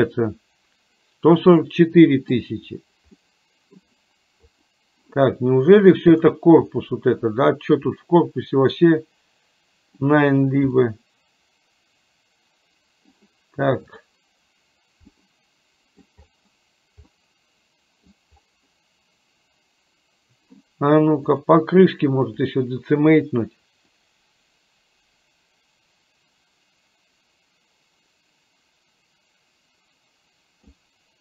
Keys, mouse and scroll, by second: 1.5 middle click, 3.3 middle click, 4.5 click, 6.2 click, 6.9-10.1 middle drag, 10.9-13.3 middle drag, 13.9 click, 15.2 middle click, 17.2-18.3 middle drag, 21.4-22.6 drag, 24.6-30.8 drag.